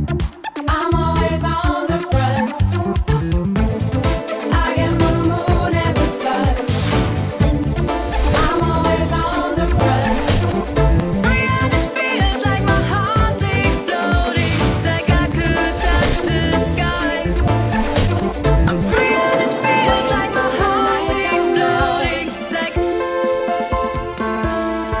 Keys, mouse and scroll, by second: 16.2 drag, 23.3 F2.